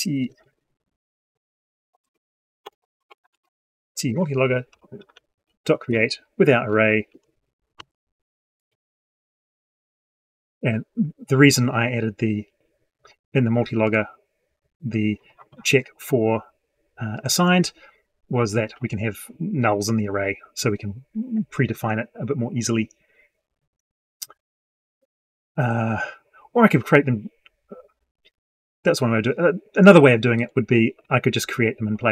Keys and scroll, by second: 1.9 ctrl+space.